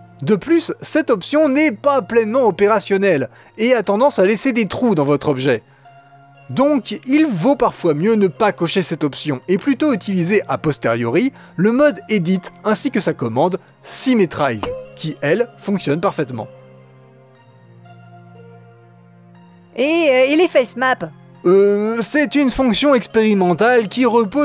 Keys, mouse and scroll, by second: 2.1-3.7 drag, 3.9 middle click, 4.1 Tab, 4.2 middle click, 4.4-4.7 scroll up 1, 4.7 middle click, 5.1 click, 5.3 scroll up 1, 5.3 middle click, 5.5 click, 5.6 scroll down 1, 5.7-8.3 middle drag, 6.5 click, 6.7 right click, 8.3-9.9 drag, 11.9-12.7 drag, 13.1 a, 14.1-17.5 drag, 17.5 middle click, 20.3-22.7 drag.